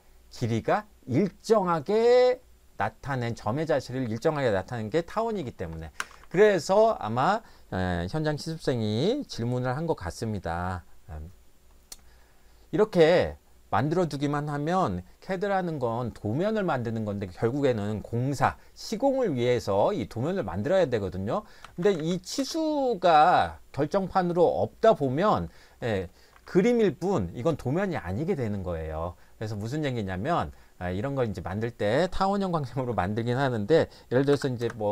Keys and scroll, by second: 6.0 Escape, 6.2 Escape, 21.4-22.5 typing, 26.3 Escape, 34.3 i, 34.6 Return.